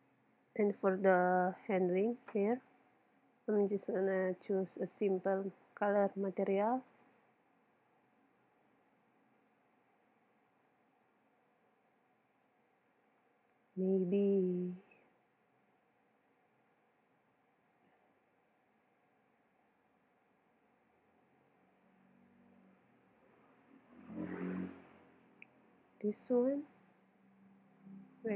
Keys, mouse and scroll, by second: 1.3-3.0 right drag, 3.7-5.4 drag, 5.4-6.9 middle drag, 6.9-9.9 right drag, 8.4-14.1 drag, 27.5 click.